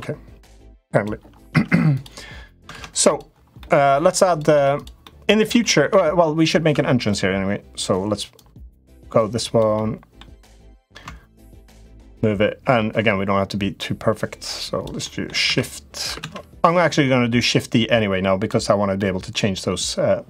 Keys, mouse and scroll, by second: 0.3 click, 1.2 Tab, 1.7 click, 2.5 ctrl+z, 3.3 middle click, 4.0 click, 4.3 Tab, 4.8 middle click, 5.3 shift+middle click, 5.7 middle click, 6.5 Tab, 6.8 click, 8.1-9.4 drag, 9.6 middle click, 10.4-14.6 drag, 14.9 middle click, 15.3 shift+d, 17.2-18.2 drag, 18.7 middle click.